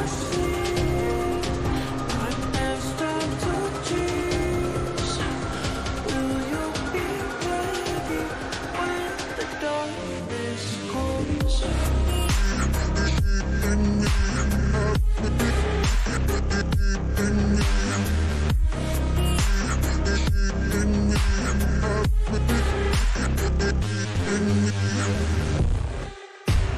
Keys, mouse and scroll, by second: 0.4 click, 0.9-3.3 drag, 3.7 click, 6.1 click, 6.1 click, 7.7 click, 9.6-25.8 shift+drag, 26.4 click.